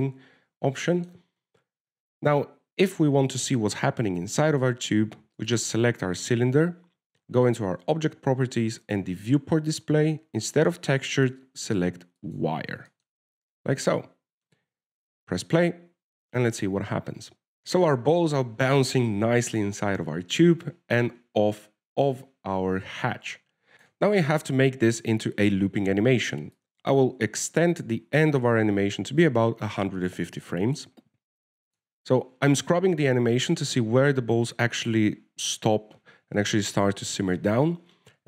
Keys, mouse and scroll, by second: 0.9 KP_0, 1.7-2.0 scroll down 1, 2.2 shift+middle click, 6.7 right click, 8.8 click, 10.2 click, 12.4 click, 14.2 shift+middle click, 14.5-15.0 scroll up 2, 14.8 a, 15.1 shift+middle click, 16.8 alt+a, 23.7 alt+a, 24.2 alt+a, 25.0 click, 27.9 click, 31.6 alt+a, 32.9 click, 33.4 alt+a.